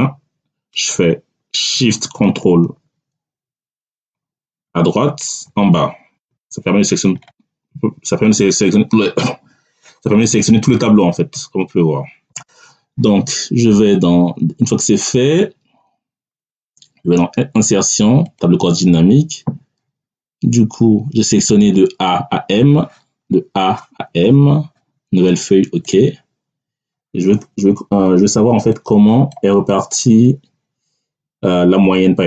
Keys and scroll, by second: 4.5 ctrl+shift+Right, 5.3 ctrl+shift+Down.